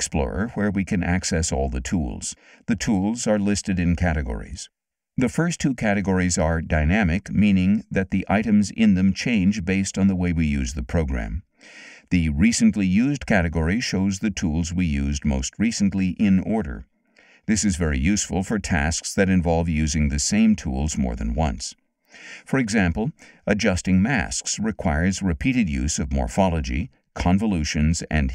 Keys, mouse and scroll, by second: 6.9 click, 8.7 click, 12.1 click.